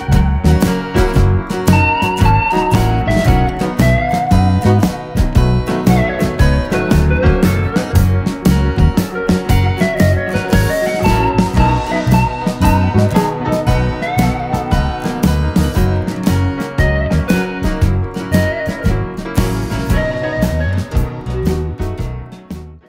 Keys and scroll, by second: 4.4 d.